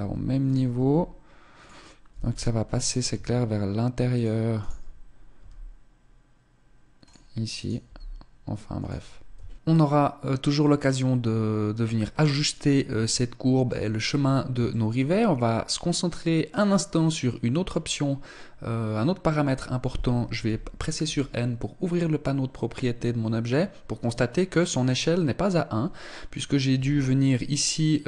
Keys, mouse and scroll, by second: 0.3 s, 1.2 click, 1.6 g, 2.6 s, 4.2 right click, 4.7 g, 7.1 right click, 7.4 g, 8.9 Tab, 12.6 shift+middle click, 13.8 shift+middle click, 13.8-15.8 scroll up 1, 16.2 right click, 19.9 n, 26.3 s.